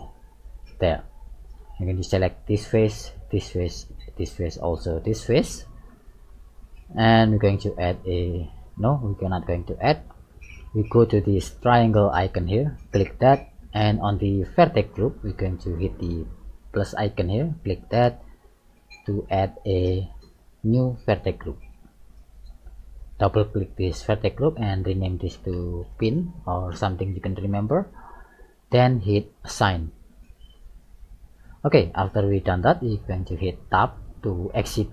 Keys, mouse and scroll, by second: 0.5 click, 1.2 middle click, 2.3 right click, 3.2 shift+right click, 4.1 shift+right click, 5.6 shift+right click, 5.7 middle click, 10.7 shift+middle click, 13.9 click, 17.5 click, 23.4 click, 23.6 click, 30.0 click, 31.5 middle click, 33.8 Tab, 34.5-34.9 scroll down 5.